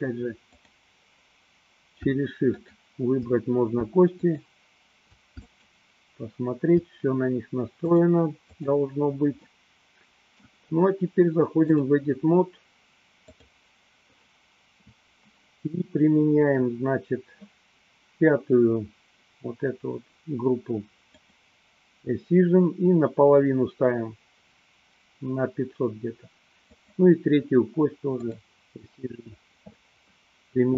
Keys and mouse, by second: 2.6 shift+click, 4.2 shift+click, 5.6 shift+click, 7.8 click, 9.6-10.7 middle drag, 11.8-13.7 drag, 21.3 click, 26.8 click.